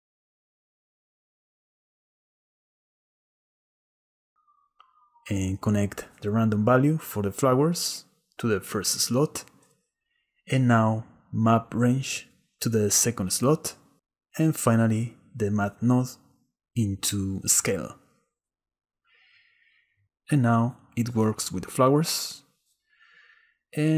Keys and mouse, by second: 0.0 click, 0.3 click, 1.5 click, 5.4-8.5 drag, 9.2 drag, 9.4-10.5 drag, 12.1-13.3 drag, 14.3-16.5 drag, 18.4-21.6 drag, 22.1 click.